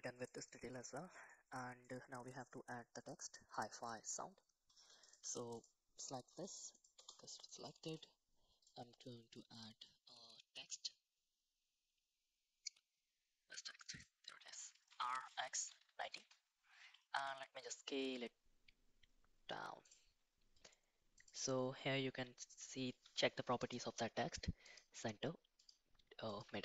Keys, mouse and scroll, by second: 0.5 middle click, 1.8 middle click, 3.2 middle drag, 3.6 middle click, 5.2 Tab, 6.3 shift+s, 6.9 Tab, 7.5 middle click, 7.8 shift+a, 14.9 r, 17.1 s, 21.2 click, 23.6-24.8 drag, 25.6 click.